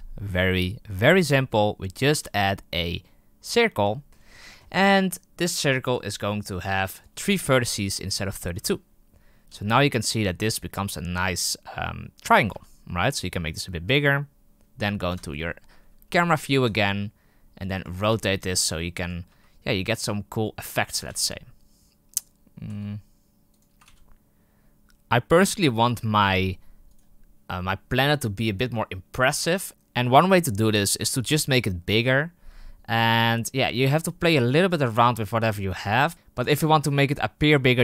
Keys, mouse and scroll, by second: 1.8-3.4 middle drag, 3.4 shift+a, 3.9-4.6 shift+middle drag, 4.6-5.1 scroll up 4, 8.5-9.6 drag, 9.6 z, 12.5 s, 15.0 KP_0, 16.6 r, 17.8 r, 19.2 r, 20.9 r, 22.6 r, 23.6 r, 26.8 right click, 33.2-33.8 right drag, 33.8 g.